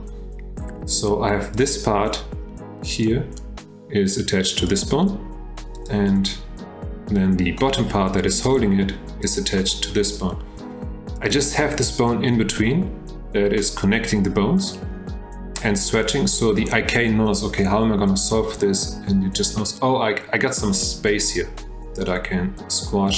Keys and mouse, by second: 3.0 click, 4.6 click, 5.7 click, 9.3 click, 11.2 click.